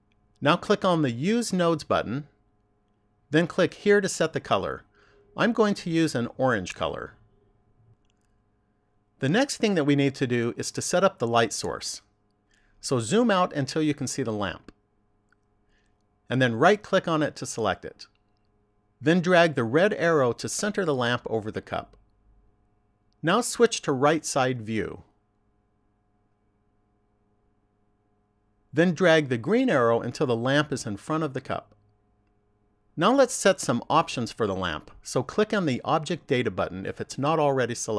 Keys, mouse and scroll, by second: 2.0 click, 3.4 click, 14.0-15.3 scroll down 5, 15.3-15.9 scroll down 1, 17.6 right click, 19.4 click, 24.6 click, 29.2 click, 35.6 click.